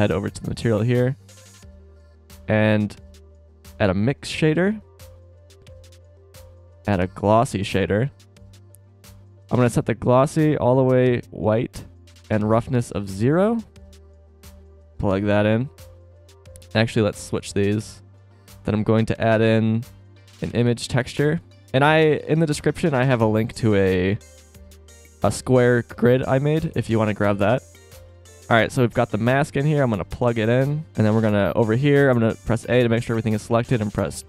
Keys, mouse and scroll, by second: 2.7 shift+a, 5.7 shift+a, 10.3 click, 12.1 click, 14.2 click, 15.7 click, 18.3 shift+a, 23.3-27.6 middle drag, 28.5-29.8 middle drag, 29.8-30.5 drag, 31.1 a, 31.6 a, 33.9 s.